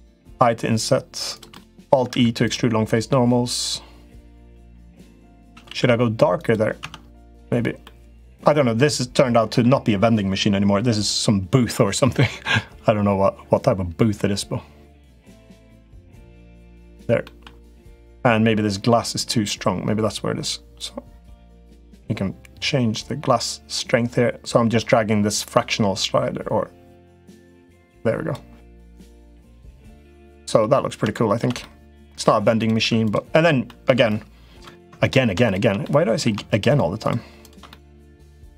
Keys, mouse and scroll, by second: 0.0 i, 1.4 middle click, 1.8 alt+e, 5.2 a, 5.4 g, 6.6 Tab, 7.6 middle click, 9.2 middle click, 15.1 click, 15.7 click, 17.0 middle click, 17.4 click, 20.6-24.6 drag, 25.2-28.1 drag, 29.2-30.3 middle drag, 30.9 shift+middle click, 31.3 middle click, 32.3 click, 32.6 Tab, 32.8 click, 33.4 middle click, 35.7 middle click, 36.5 shift+click, 36.8 shift+click, 37.5 middle click, 38.3 shift+d.